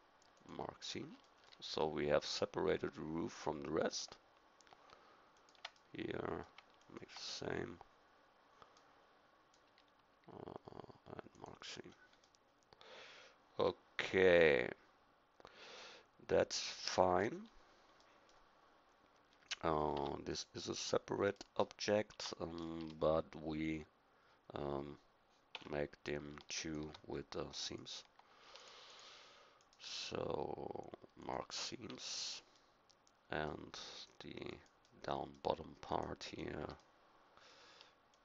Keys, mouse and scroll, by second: 2.6 middle click, 5.3-7.5 middle drag, 11.3 click, 12.4-14.8 middle drag, 19.9 Tab, 22.1 Tab, 25.5 z, 32.1-33.1 middle drag, 34.8-37.3 middle drag, 37.3-38.2 drag.